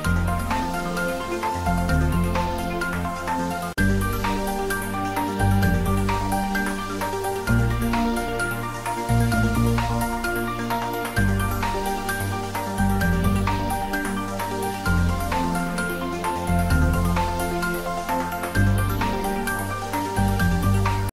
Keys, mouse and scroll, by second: 1.3 click, 1.5 scroll down 1, 1.7 middle click, 2.0 scroll up 1, 2.5 ctrl+r, 2.7-3.1 scroll down 1, 3.6-4.1 scroll up 1, 4.1 click, 4.6 s, 5.2 click, 5.5 g, 8.2 click, 8.4 scroll down 1, 9.0 Tab, 9.7 3, 10.0 scroll down 1, 10.3 middle click, 10.7 click, 11.4 e, 13.3 click, 14.1 shift+z, 14.3-14.8 scroll up 1, 15.1 middle click, 15.7 shift+z, 16.1 scroll down 1, 16.3 middle click, 17.3 Tab, 19.5 click, 19.9 scroll up 1, 20.1 middle click, 20.4 scroll, 20.5 middle click, 21.0 scroll down 1.